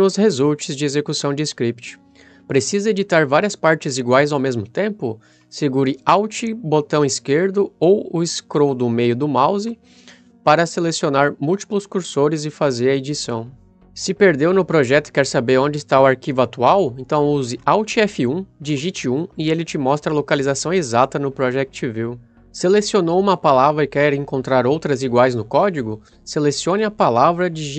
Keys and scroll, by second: 18.0 alt+F1, 18.7 1.